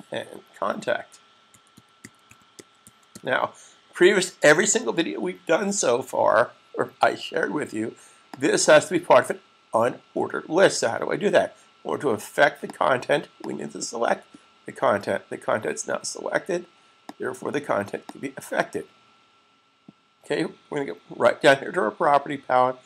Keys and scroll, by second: 0.9-1.6 typing, 2.7 typing, 5.1 super+s.